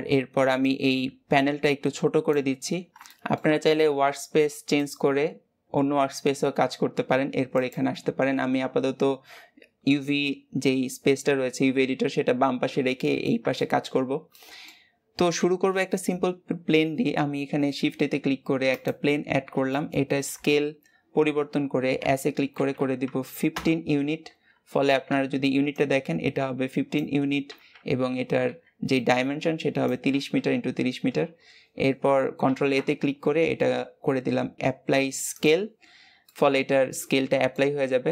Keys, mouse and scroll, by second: 0.9-7.6 drag, 12.9-13.5 scroll down 1, 13.5 shift+middle click, 13.9 scroll down 1, 14.2-18.7 middle drag, 19.1 scroll up 1, 19.6-21.9 shift+middle drag, 21.9 s, 24.3-24.7 scroll down 2, 30.4-35.3 scroll down 13, 35.7-36.1 scroll down 3, 36.1-37.6 middle drag, 37.6-38.1 scroll up 1.